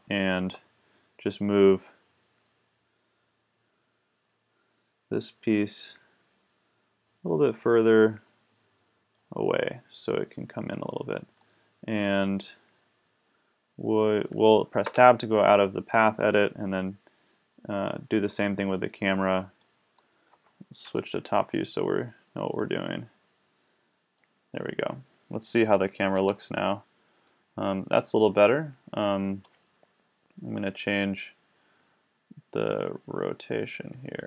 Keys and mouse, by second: 2.6 click, 5.6-7.2 drag, 9.5 middle click, 14.9 Tab, 15.9-17.5 drag, 18.4 click, 18.8-19.6 drag, 20.4 click, 20.8 KP_7, 26.1 KP_0, 33.5-34.2 middle drag.